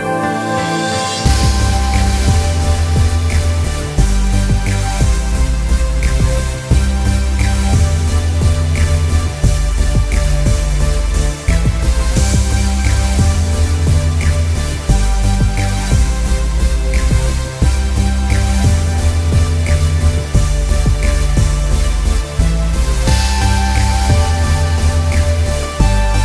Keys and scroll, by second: 6.3 p, 6.9 ctrl+=, 7.2 ctrl+=, 9.5 ctrl+z, 9.9 ctrl+=, 10.0 ctrl+=, 25.3 ctrl+=.